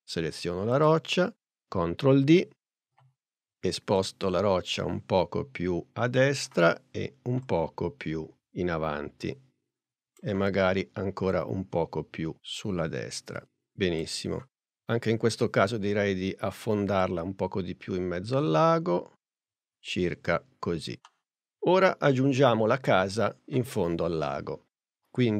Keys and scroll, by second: 2.2 super+d, 2.9 p.